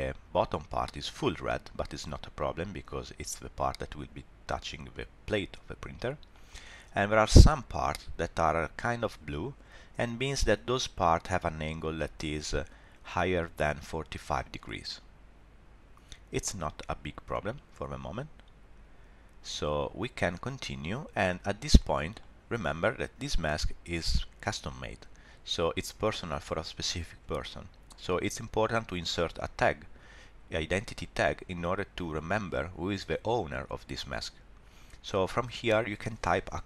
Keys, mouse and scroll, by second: 4.9 middle click, 14.8 middle click, 21.3 shift+middle click, 24.1 middle click, 25.6-27.1 scroll up 1, 35.2 click.